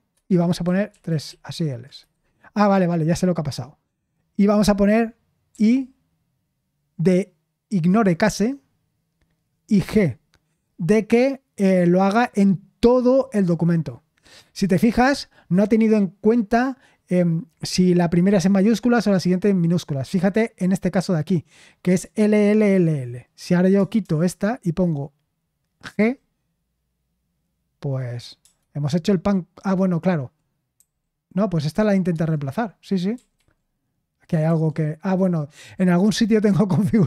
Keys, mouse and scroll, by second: 0.0-2.0 typing, 5.5 i, 9.8 g, 23.7 BackSpace, 24.0 BackSpace, 25.8 g, 28.4 BackSpace, 30.7 g, 32.1 Return, 33.1 typing, 34.4 typing.